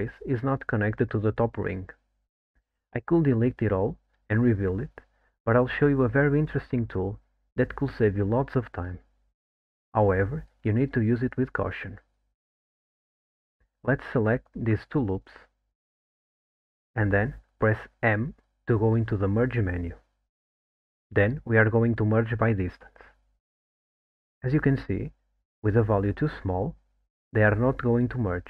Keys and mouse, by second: 0.5-1.5 middle drag, 2.5 alt+middle click, 5.5 click, 6.6 2, 7.4 click, 17.0 alt+shift+click, 19.1 m, 27.6-28.4 drag.